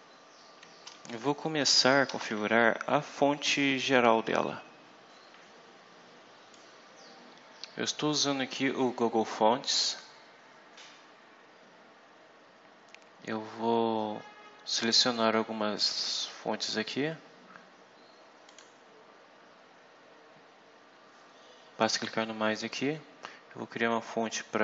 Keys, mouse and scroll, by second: 1.6 Return, 6.5 click, 7.9-8.2 scroll up 2, 8.5 scroll down 2, 18.4 click, 22.3-22.7 scroll up 2, 23.6 scroll down 2.